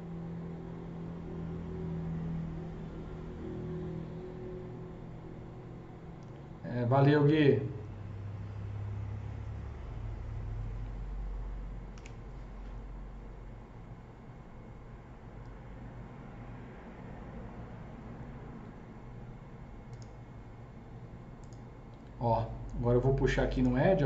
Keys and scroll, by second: 11.9 KP_0.